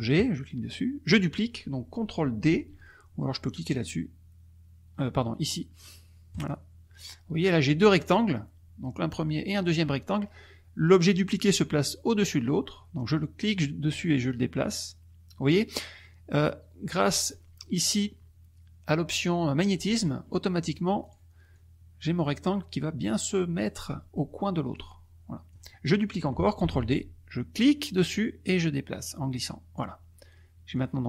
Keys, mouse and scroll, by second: 0.1 click, 6.3 click, 7.9 click, 9.4 click, 13.5-17.5 drag, 20.6 click, 21.1 click, 21.5-23.8 drag, 24.7 click, 26.6 ctrl+d, 27.7-29.9 drag, 30.7 click.